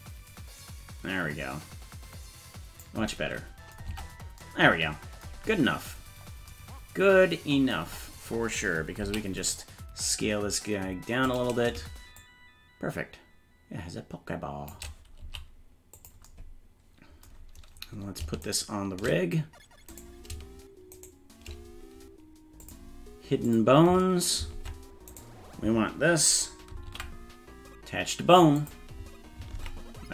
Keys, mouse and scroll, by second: 3.9 Tab, 5.9-6.5 scroll down 3, 6.5 scroll down 1, 9.0 s, 12.2-14.7 shift+drag, 15.2 s, 18.5 shift+right click, 20.0 right click, 21.0 shift+right click, 22.6 click, 23.5 click, 24.6 ctrl+Tab, 25.1 right click, 26.9 ctrl+p, 29.6 ctrl+Tab.